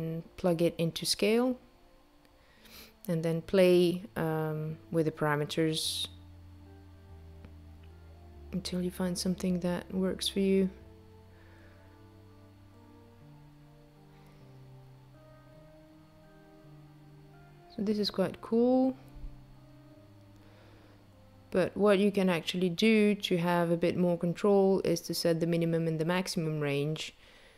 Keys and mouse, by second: 2.9 click, 22.4 click, 23.9 click, 24.9 right click.